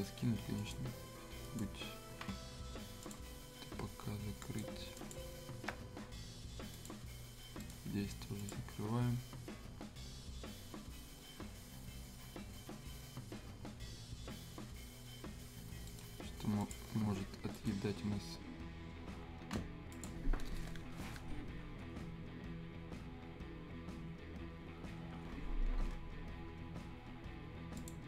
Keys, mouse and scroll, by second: 1.7 click, 5.6 Escape, 6.7 click, 7.6 right click, 8.5 click, 15.8 right click, 16.6 click, 17.5 right click, 19.9 click, 27.7 click.